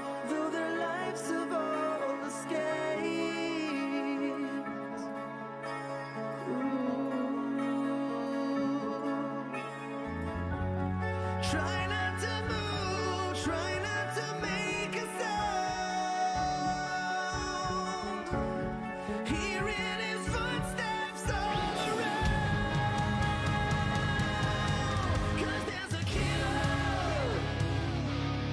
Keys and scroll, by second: 0.2 w, 8.8-10.9 typing, 17.2 Delete, 22.0 Delete, 22.6-24.1 typing, 27.5-28.5 typing.